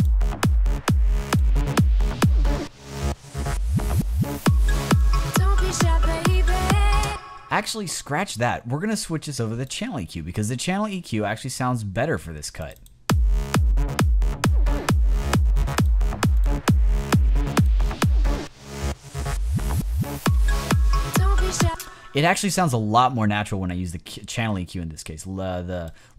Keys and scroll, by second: 6.9 space, 21.5 space.